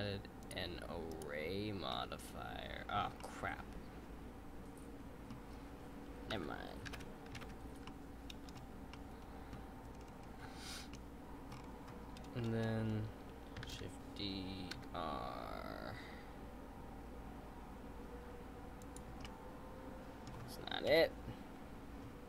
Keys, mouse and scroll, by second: 0.4-1.9 drag, 1.9-6.2 middle drag, 6.3 ctrl+z, 7.8-9.8 middle drag, 9.8-10.8 scroll down 5, 10.8 scroll down 1, 10.9 middle click, 11.5-13.1 scroll up 5, 13.1-13.6 scroll up 1, 13.6 shift+d, 19.2-20.9 middle drag, 20.9 KP_7.